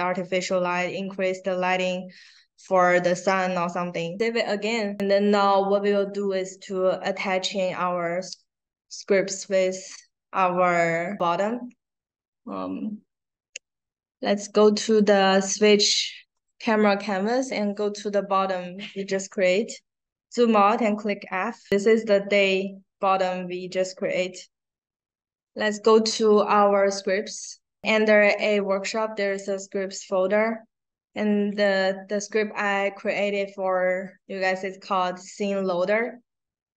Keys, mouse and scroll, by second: 4.9 click, 5.9 click, 14.8-15.8 drag, 16.2 click, 17.4 click, 19.0-19.8 scroll down 1, 19.8-20.9 scroll down 1, 21.7 middle click, 22.4 middle click, 25.3 click, 29.2 click, 29.4 click, 31.5 click.